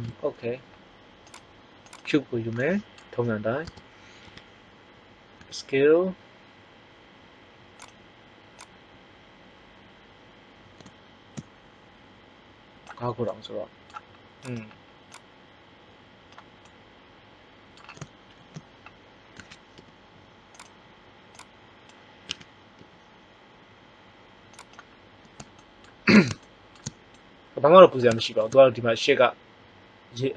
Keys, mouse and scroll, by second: 2.5-3.6 middle drag, 3.6 Tab, 4.2 KP_1, 5.3 s, 8.8-10.1 drag, 13.3 middle click, 14.4 right click, 15.1 click, 16.7 middle click, 16.9 middle click, 18.2 ctrl+l, 19.3 s, 20.7-22.2 drag, 22.2 s.